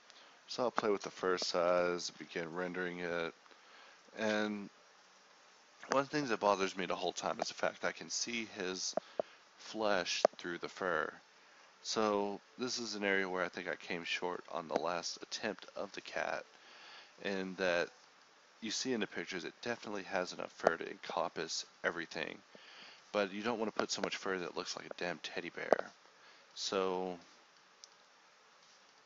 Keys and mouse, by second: 0.2 shift+a, 1.7-3.2 drag, 3.5-4.7 drag, 5.0-5.7 drag, 5.7 shift+a, 6.2 shift+a, 8.7-11.9 drag, 12.5 g, 13.0-13.4 drag, 13.4 g, 13.9 g, 14.2-15.4 drag, 15.5-16.2 middle drag, 16.2-17.5 drag, 16.2 g, 18.2-21.2 drag, 23.1 n, 23.7 ctrl+s, 26.1 click, 26.9 click.